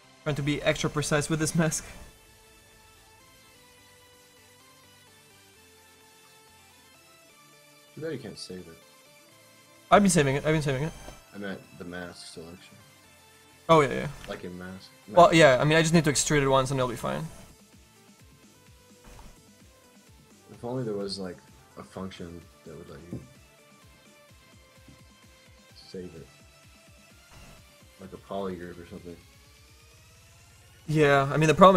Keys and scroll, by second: 14.3 f.